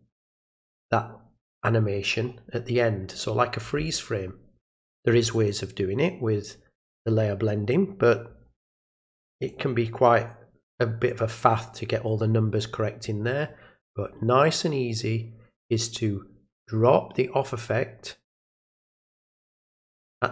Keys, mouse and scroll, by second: 9.4 click, 15.0-18.3 drag.